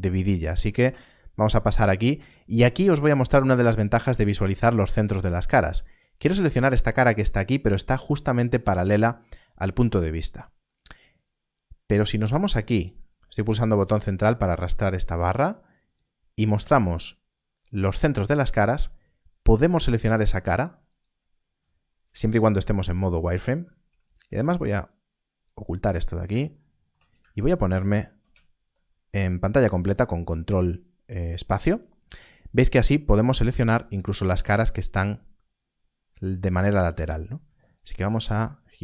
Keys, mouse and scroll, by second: 2.8-3.1 scroll up 1, 15.8 click, 21.9 click, 22.8 click, 28.1 ctrl+space, 32.5 click, 36.8 click, 37.6 click.